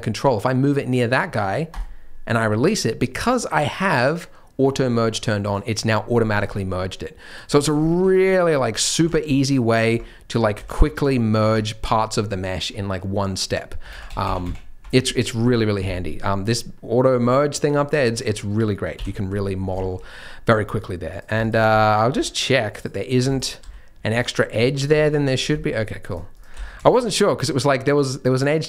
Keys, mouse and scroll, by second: 5.4 click, 6.2-7.2 scroll down 7, 6.7-7.2 scroll up 1, 7.2 click, 7.2 scroll up 1, 7.5 shift+click, 7.8 shift+middle click, 8.4 click, 8.9 g, 10.2 click, 10.5 g, 11.7 scroll down 2, 12.3 middle click, 13.4 click, 13.8-14.4 ctrl+z, 18.0-18.9 scroll up 5, 18.9 KP_3, 19.6-20.2 scroll down 4, 19.8 shift+middle click, 20.2 middle click, 20.2-21.1 scroll up 3, 21.1 click, 21.3 shift+click, 21.6 g, 22.7 click, 23.3 shift+click, 23.6 x, 24.7 click, 25.0 shift+click, 25.3 scroll down 4, 25.6 shift+middle click, 26.1 shift+click, 26.3 shift+click, 26.5 f, 26.8 shift+middle click, 26.9-27.8 scroll up 1, 27.8 click, 27.8-28.6 scroll up 1.